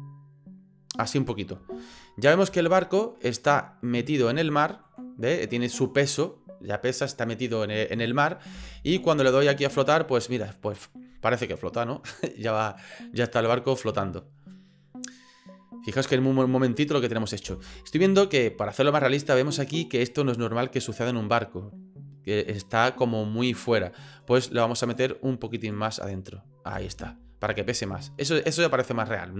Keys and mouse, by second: 2.0 click, 2.6 shift+middle click, 2.9-4.2 shift+drag, 4.4 ctrl+click, 8.5 space, 17.5 space, 17.7-19.4 drag, 24.8 click, 26.0 click, 26.7 space.